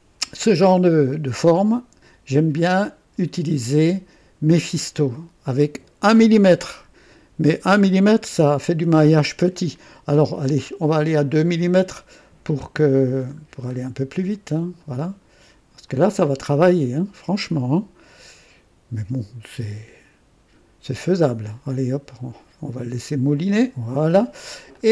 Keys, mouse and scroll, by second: 2.5 click, 4.5 click, 10.5 scroll up 1, 11.3 scroll up 1, 13.1-13.5 scroll up 1, 13.7-14.5 scroll up 2, 15.8 click, 24.7-24.9 drag.